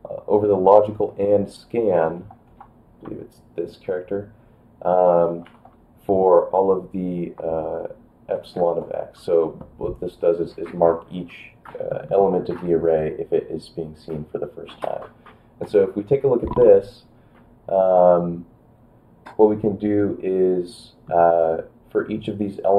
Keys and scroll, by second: 2.0 5, 2.5 BackSpace, 3.0 `, 5.4 e, 8.6 x, 15.7 Return.